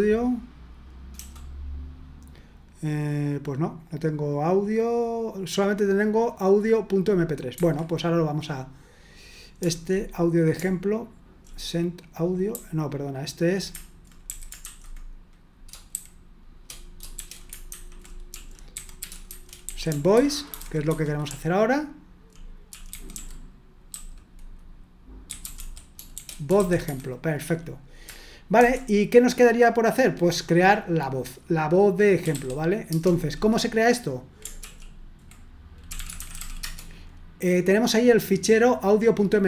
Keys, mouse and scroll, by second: 1.1 BackSpace, 7.5 Escape, 9.6-11.4 typing, 12.5-14.6 typing, 15.9 shift+g, 17.1-21.3 typing, 23.6-27.1 typing, 32.0-32.8 typing, 32.8 Return, 34.6 ctrl+l, 35.6-36.9 typing.